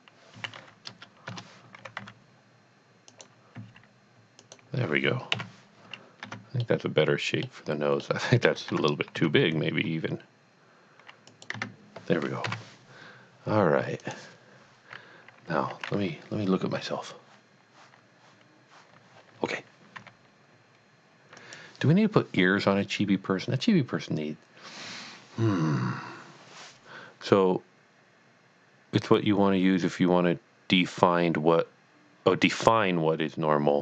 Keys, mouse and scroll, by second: 0.3-2.0 typing, 1.3 KP_Enter, 3.1 click, 3.6 s, 4.5 click, 5.3 KP_1, 6.2 Tab, 6.6 middle click, 7.6 scroll down 1, 8.2 middle click, 8.8 Tab, 9.1 a, 9.6 s, 11.3 click, 11.6 Tab, 12.4 KP_1, 14.0 click, 20.0 g, 21.4 click.